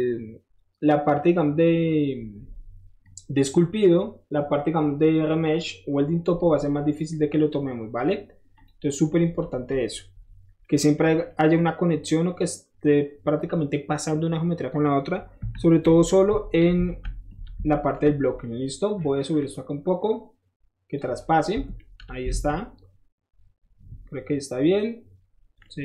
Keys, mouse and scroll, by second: 3.1 click, 8.5 click, 9.0 middle drag, 9.6 scroll up 1, 10.5-15.5 middle drag, 15.5 KP_1, 15.8 Tab, 16.5 middle click, 16.9 alt+z, 17.1 middle click, 17.6 alt+shift+z, 19.4-21.0 drag, 21.1 middle drag, 21.1 scroll up 1, 21.7 Tab, 22.3 alt+z, 22.5 middle click, 25.6 middle drag.